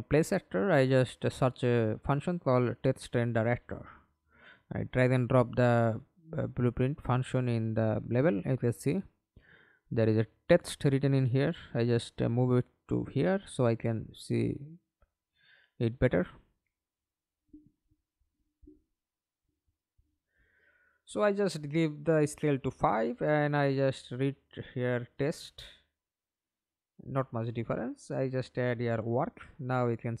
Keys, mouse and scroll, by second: 0.6-1.7 typing, 3.8 f, 4.4 alt+click, 5.8 ctrl+z, 6.5 alt+click, 7.8-8.7 alt+scroll up 1, 8.8 scroll up 1, 9.0 alt+click, 9.6 w, 12.3 f, 13.1-14.1 scroll up 2, 14.9 f, 18.0-18.6 scroll down 1, 18.6-18.9 scroll up 1, 20.2 5, 20.6 Return, 23.8-25.2 typing, 25.3 Return, 27.8-28.9 typing.